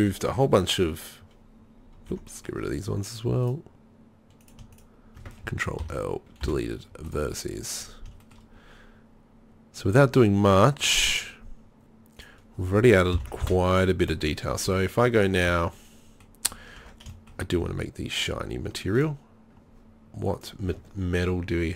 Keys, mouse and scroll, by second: 0.3 Tab, 2.1 Tab, 5.8 ctrl+l, 6.4 Delete, 12.2-13.1 right drag, 13.1 ctrl+l, 13.4 Delete, 14.7 z, 15.6 z, 16.8 Tab.